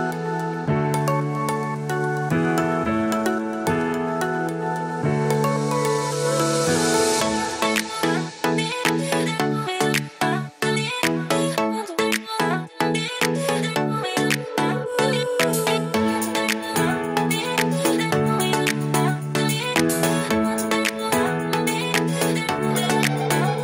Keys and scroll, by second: 6.1 super+Right, 19.5 super+s.